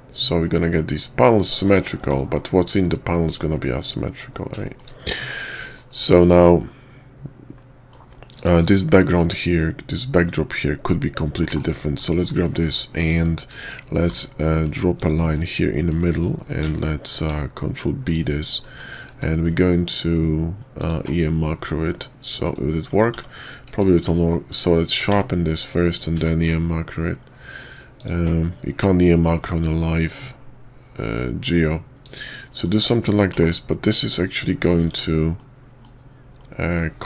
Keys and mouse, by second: 2.0 shift+2, 2.8-3.6 middle drag, 4.0 middle click, 4.7 shift+middle click, 5.2 middle click, 5.6 middle click, 5.9 shift+middle click, 6.3-7.9 middle drag, 8.2 click, 11.4 /, 12.3 middle drag, 13.1 Tab, 14.0 ctrl+r, 15.7 click, 16.6 ctrl+b, 18.6 click, 19.1 q, 23.0 Tab, 23.1 Tab, 23.7 q, 25.1 Tab, 26.1 q, 32.6 middle click, 33.3 /, 34.2 middle click, 34.9 Tab, 35.3-35.9 middle drag, 36.3-36.8 middle drag.